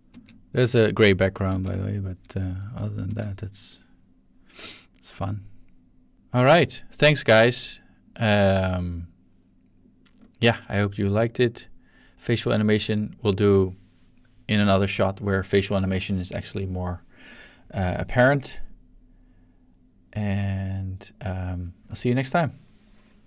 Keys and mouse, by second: 0.1 space, 1.4 space, 2.8 click, 3.1-4.2 drag, 3.1 space.